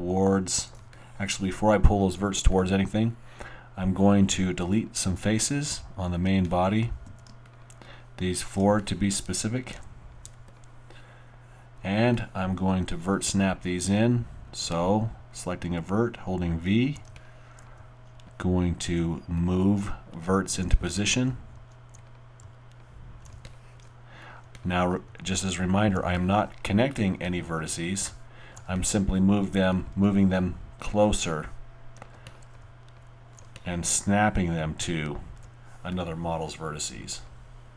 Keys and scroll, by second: 7.0 alt+q, 7.6 shift+q, 15.6 w, 16.6 v, 17.8 v, 19.7 v, 21.6 v, 22.4 alt+v, 23.6 alt+v, 25.1 alt+v, 25.6 alt+v, 27.6 alt+v, 30.3 alt+v, 32.6 alt+v.